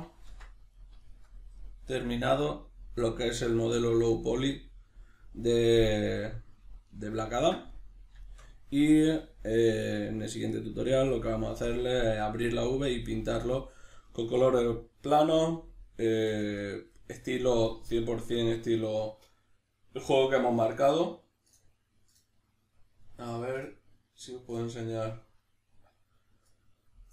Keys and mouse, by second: 0.3 shift+c.